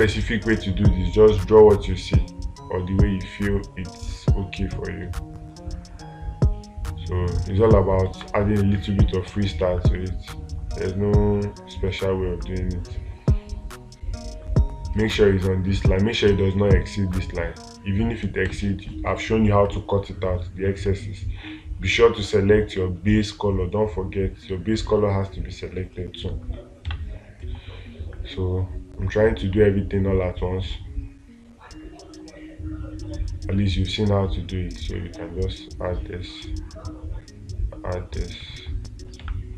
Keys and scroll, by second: 8.5 space, 27.3 space.